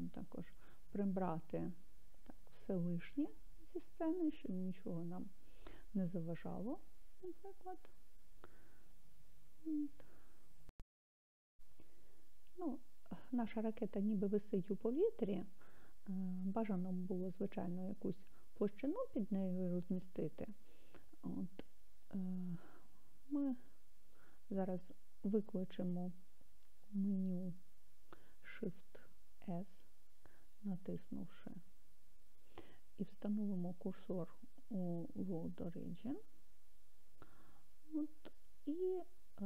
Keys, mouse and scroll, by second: 0.2 click, 22.1-24.2 middle drag, 38.8-39.4 drag.